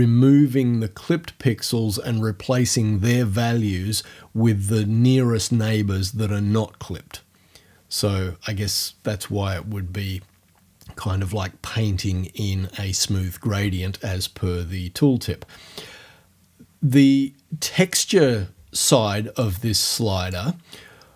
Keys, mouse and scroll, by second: 19.4-20.5 drag.